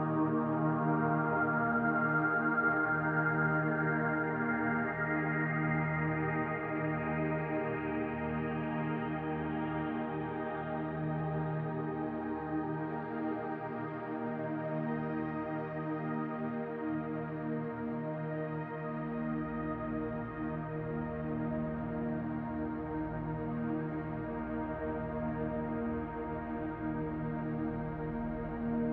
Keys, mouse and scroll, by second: 0.7 r, 2.7 g, 7.8 shift+middle click, 9.7 click, 10.8 l, 15.2 shift+d, 21.7 r, 21.7 g, 24.2 shift+d, 26.9 r, 28.6 s.